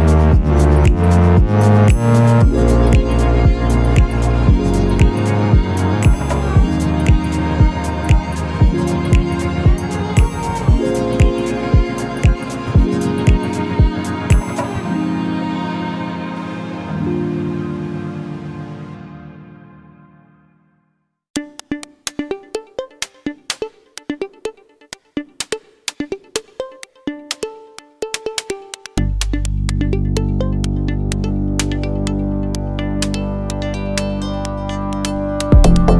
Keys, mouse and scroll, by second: 4.4 middle click, 4.4 scroll down 3, 5.0 click, 5.0 scroll down 6, 5.1 shift+middle click, 5.2 middle click, 5.4 shift+middle click, 5.5 scroll up 3, 5.5 Tab, 5.6 middle click, 5.7 3, 5.7-6.1 scroll down 6, 5.8 shift+middle click, 5.9 shift+click, 6.1 shift+middle click, 6.3 shift+middle click, 6.3 scroll up 6, 6.5 i, 7.4 e, 7.7 Tab, 7.8-8.1 scroll down 6, 7.9 click, 8.1 middle click, 8.1 middle click, 8.3-8.8 scroll up 7, 8.3 Tab, 8.4 g, 8.8 middle click, 9.0 i, 9.7 middle click, 9.7 g, 10.0 g, 10.4 Tab, 10.4 click, 10.4-10.9 scroll down 7, 10.7 middle click, 10.9 middle click, 10.9 scroll up 10, 11.1 shift+middle click, 11.3 middle click, 11.5 shift+middle click, 11.6 scroll up 2, 11.9-12.2 scroll down 3, 12.0 click, 12.1 middle click, 12.2 shift+middle click, 12.3 scroll up 2, 12.4 shift+middle click, 12.6 middle click, 13.0 click, 13.0 middle click, 13.1 Tab, 13.4 ctrl+r, 13.4 middle click, 13.6 scroll down 2, 13.8 shift+middle click, 13.8 z, 13.9 b, 14.3 Delete, 14.4 z, 14.5 alt+middle click.